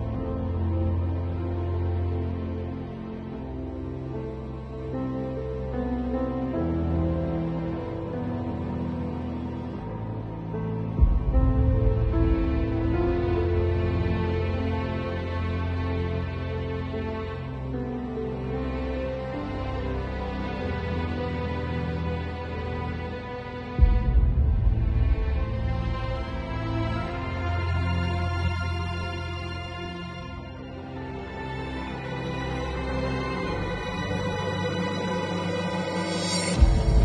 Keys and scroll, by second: 15.5 2, 18.7 [, 22.8 v, 25.4 super+u, 31.4 space, 35.5 b.